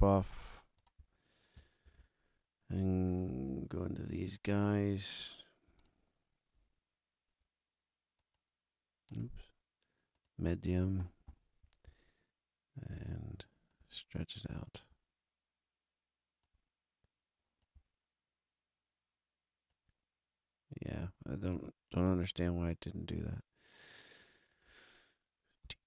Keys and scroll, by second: 1.8 super+=, 25.6 t.